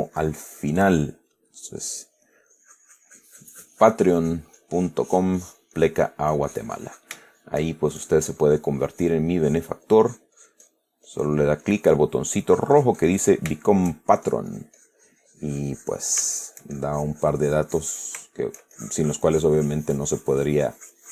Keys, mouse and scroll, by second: 0.8-1.2 middle drag, 2.1-2.6 middle drag, 2.8-4.8 drag, 4.9-6.4 drag, 6.6 click, 7.6-8.0 shift+middle drag, 8.3 shift+click, 9.8 click, 10.3 click, 11.3-12.5 drag, 13.8 shift+click, 14.5-16.6 shift+drag, 16.6-17.0 shift+middle drag, 18.3 shift+click, 18.5-19.0 shift+middle drag, 19.0-21.1 shift+drag.